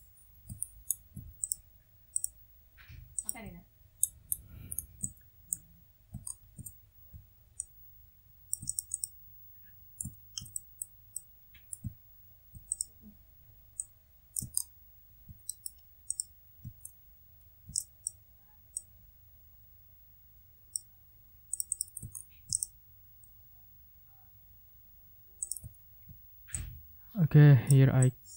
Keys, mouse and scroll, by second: 0.5-1.0 ctrl+scroll up 4, 1.4 ctrl+click, 2.1 click, 3.2 ctrl+click, 3.9-4.9 ctrl+scroll up 6, 5.0 ctrl+click, 6.2 ctrl+scroll down 2, 7.6-8.6 shift+drag, 9.0 shift+middle click, 9.1 shift+click, 10.1 ctrl+scroll down 1, 10.5 ctrl+middle click, 11.1 ctrl+middle click, 11.9 ctrl+scroll up 2, 12.7 ctrl+middle click, 13.8 middle click, 14.5 ctrl+scroll down 2, 15.4 ctrl+middle click, 16.1 middle click, 16.8 ctrl+scroll down 2, 17.3 ctrl+scroll up 2, 18.1 ctrl+click, 18.7-20.9 drag, 21.5 click, 22.1 ctrl+scroll down 2, 22.5 ctrl+click, 23.2 scroll down 2, 25.4 click, 25.7 ctrl+scroll down 2, 25.9 ctrl+scroll up 2, 26.5-27.8 middle drag, 28.0 click.